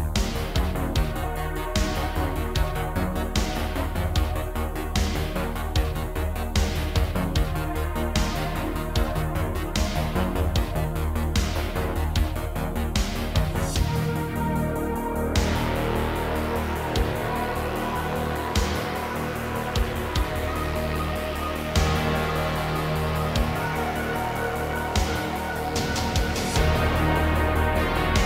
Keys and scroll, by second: 0.0-1.3 typing, 2.7 ctrl+r, 3.1 g, 3.3 z, 4.4 2, 5.6 f, 5.9 Tab, 10.2 KP_Divide, 14.3 Tab, 17.0 Tab, 18.7 Tab, 18.9 3, 23.8 p, 25.1 Tab, 27.9 Tab.